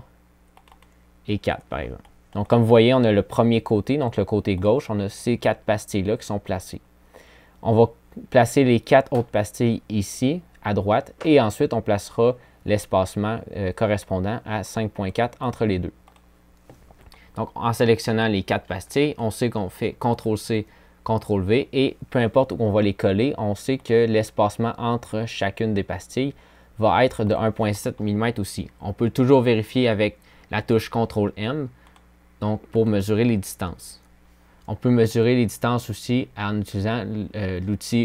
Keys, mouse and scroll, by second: 17.2 click, 17.6 click, 28.1 ctrl+m.